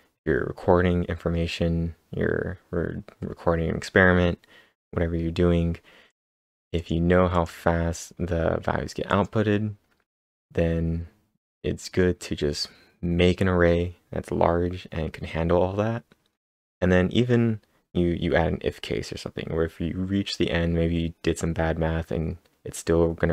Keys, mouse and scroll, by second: 6.1 click, 7.1-7.8 typing, 7.3 click, 9.1 click, 10.3 click.